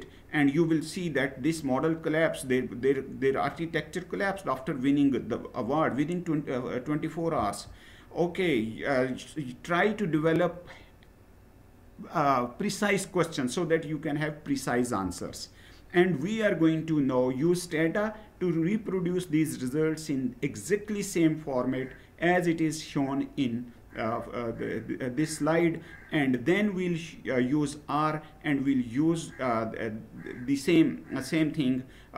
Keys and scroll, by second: 7.1 Down.